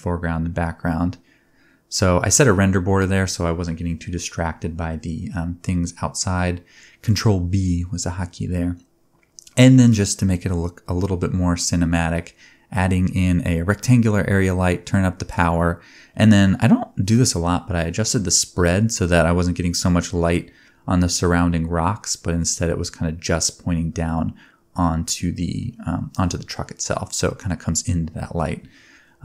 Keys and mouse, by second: 0.2 shift+c, 0.3 shift+a, 1.5 click, 1.5 g, 2.1 middle click, 2.6-19.1 drag, 12.3 space, 18.9 space, 19.1 middle click, 19.9-21.1 drag, 21.1-22.5 middle drag, 23.8 click, 25.4-26.4 drag, 26.9 click, 27.5 ctrl+t, 27.9 middle click, 27.9 g, 28.7-29.2 drag.